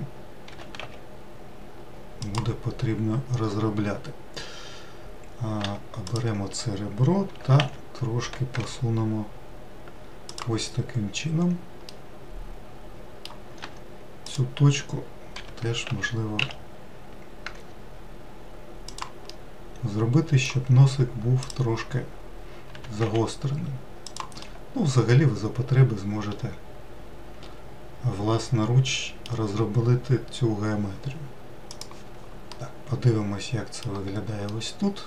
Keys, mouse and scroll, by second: 0.1 click, 1.1 g, 6.2 2, 6.7 click, 8.0 g, 12.5-14.3 middle drag, 14.3 1, 14.9 click, 16.0 g, 19.9-22.0 middle drag, 22.0 click, 23.3 g, 25.0-28.2 middle drag, 30.1-32.4 scroll down 1, 33.2-35.0 middle drag.